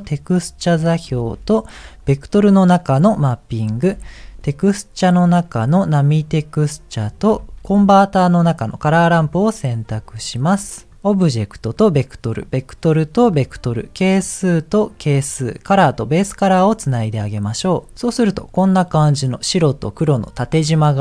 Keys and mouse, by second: 7.6 shift+a, 10.3 click, 11.2 click, 12.4 click, 14.1 click, 14.4 click, 15.7 click.